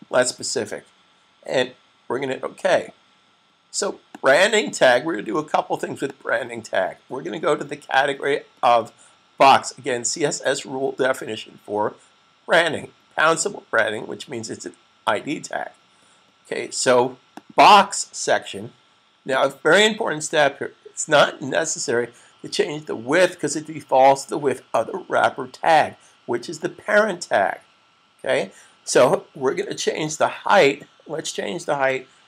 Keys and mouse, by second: 2.6 click, 17.2 click, 30.0 Tab.